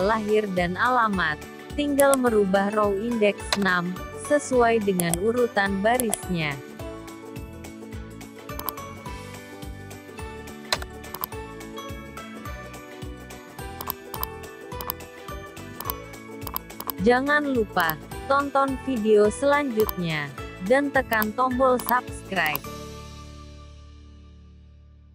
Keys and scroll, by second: 11.7 ctrl+1.